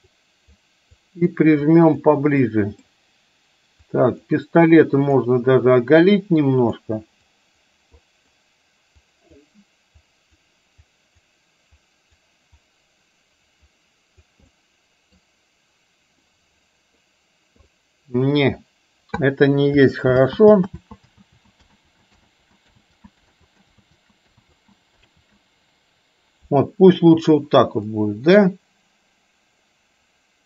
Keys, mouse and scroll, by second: 0.2 click, 0.9 click, 1.7 click, 2.6 middle click, 3.9 click, 4.9 click, 5.8 click, 6.4 click, 7.3 click, 8.1 middle click, 9.1 click, 10.1 click, 10.9 click, 11.8 click, 12.7-14.3 drag, 14.6 middle click, 16.3 middle click, 17.7 middle click, 20.2 ctrl+z, 20.7 ctrl+z, 21.2 ctrl+z, 21.7 ctrl+z, 22.3 ctrl+z, 22.9 ctrl+z, 23.4 ctrl+z, 23.8 ctrl+z, 24.4 ctrl+z, 25.2 ctrl+z, 27.8-30.4 middle drag.